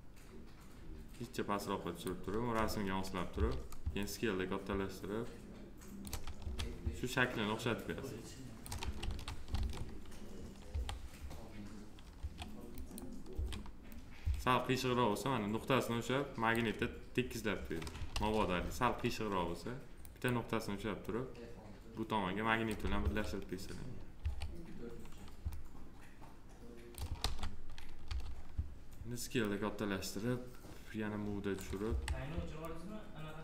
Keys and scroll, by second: 3.2 r, 6.3 w, 8.9 ctrl+z, 10.6 e, 12.1 1, 18.0 ctrl+z, 22.9 1, 27.1 ctrl+z, 27.9 r, 31.8 w.